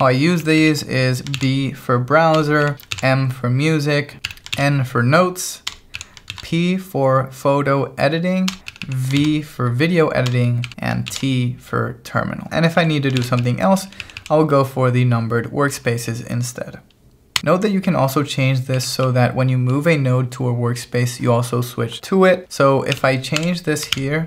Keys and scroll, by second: 0.0 k, 1.3 shift+v, 2.4 Escape, 2.6 j, 2.9 shift+v, 4.2 Escape, 4.3 j, 4.6 shift+v, 5.7 Escape, 6.0 j, 6.3 shift+v, 8.5 Escape, 8.7 j, 9.2 shift+v, 10.3 Escape, 10.7 k, 11.1 shift+v, 12.5 k, 13.1 shift+v, 13.4 j, 14.0 j, 17.4-19.6 typing, 22.9-24.2 typing.